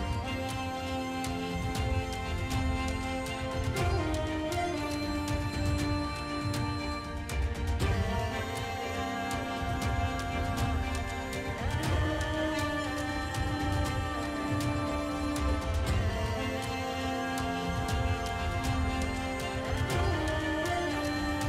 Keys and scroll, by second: 5.7 ctrl+alt+z, 10.5 space, 11.4 space, 13.8 ctrl+space, 14.0 ctrl+space, 15.0 ], 16.2 6.